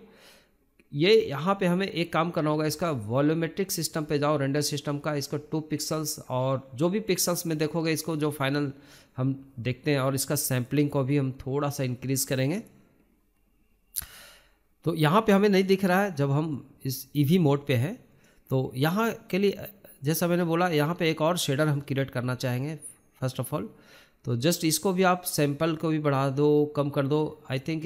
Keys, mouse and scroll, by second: 3.5 KP_0, 4.2-4.7 scroll down 1, 4.7-5.7 scroll up 1, 5.7-9.2 shift+middle drag, 9.2-10.2 scroll down 1, 10.2-21.6 drag, 21.6-23.8 shift+middle drag, 24.9-25.3 scroll down 2, 25.3-25.9 shift+middle drag, 25.9-27.4 scroll up 2.